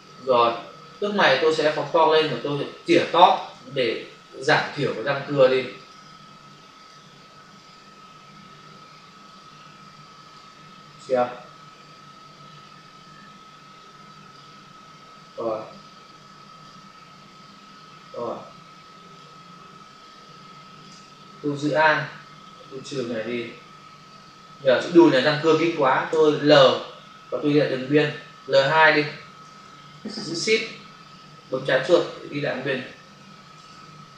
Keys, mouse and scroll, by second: 1.6 ctrl+click, 2.3 click, 3.1 click, 3.2 click, 4.3 ], 5.7 click, 5.9 click, 6.7 click, 6.9 click, 7.5 click, 10.1 click, 10.2 click, 11.8 click, 15.6 click, 18.1 click, 19.7 space, 22.4 alt+click, 25.4 space, 27.8 typing, 29.5 l, 31.4 shift+click, 32.8 Escape, 33.6 ctrl+alt+z.